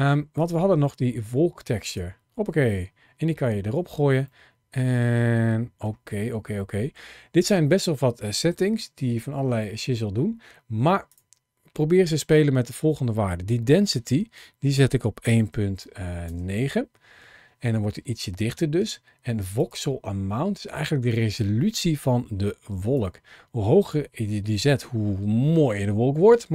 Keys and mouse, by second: 0.2-1.9 drag, 4.1-5.7 middle drag, 6.5 middle click, 10.9-16.1 drag, 19.4-22.9 drag, 23.6-26.5 drag.